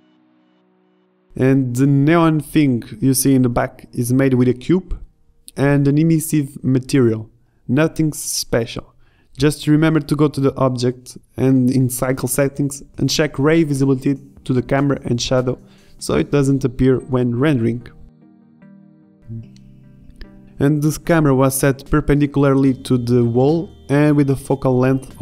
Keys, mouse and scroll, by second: 0.8-1.7 middle drag, 1.7-5.3 typing, 5.3 Tab, 6.5 s, 10.1 g, 16.9 shift+z, 17.7 g, 19.4 click, 19.5-20.9 typing, 20.6 ctrl+Up.